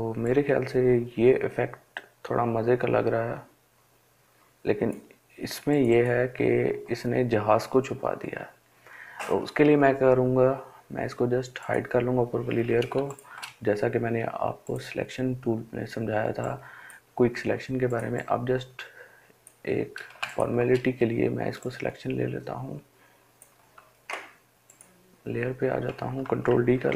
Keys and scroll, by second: 12.3 Up, 26.1 ctrl+d.